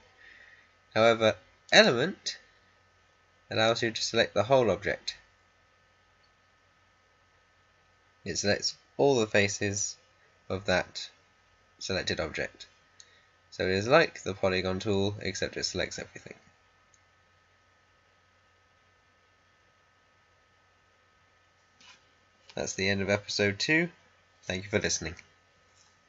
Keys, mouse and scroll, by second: 1.6 click.